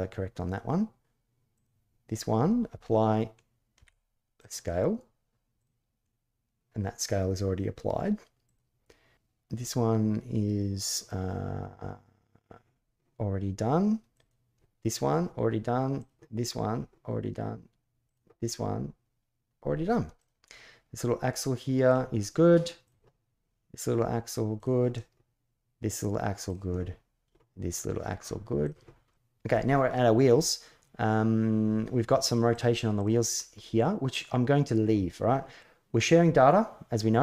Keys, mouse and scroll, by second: 1.3 click, 2.2-2.9 middle drag, 3.5 ctrl+a, 5.3 click, 8.2 click, 13.9 click, 17.8 click, 19.9 click, 20.1-21.6 middle drag, 22.6 click, 24.3 click, 26.2-28.4 drag, 32.3-33.1 drag, 33.1-33.9 middle drag.